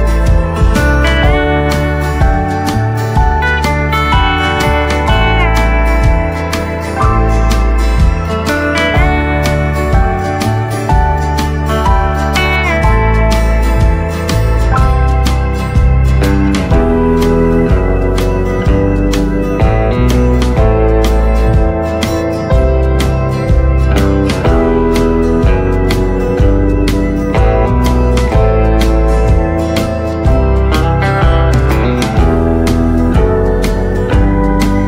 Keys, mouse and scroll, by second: 5.8 click, 10.1 right click, 11.4 click, 17.8 scroll up 2, 19.1 scroll down 1, 19.4 ctrl+z, 20.1 scroll down 1, 21.3 click, 22.0 space, 22.9 click, 25.7 4, 29.2 Return, 31.6 click, 32.1 scroll up 1, 32.6-34.8 drag.